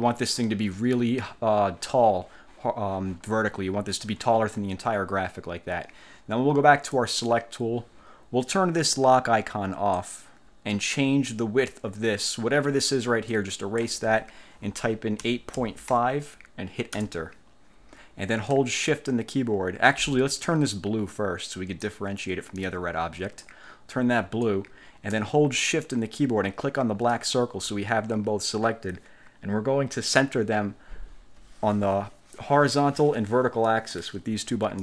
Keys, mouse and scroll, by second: 7.1 click, 10.1 click, 13.5 click, 15.2-16.6 typing, 17.1 Return, 22.0-23.7 drag, 27.3 shift+click, 33.8 click.